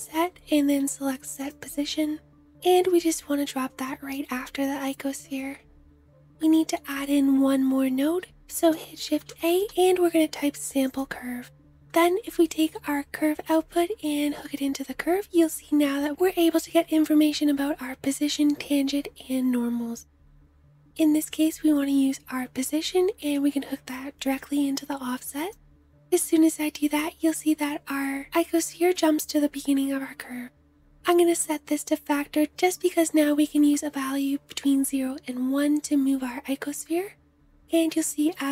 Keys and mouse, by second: 2.5-8.6 middle drag, 8.5 shift+a, 9.3-31.9 middle drag, 32.5-38.5 middle drag.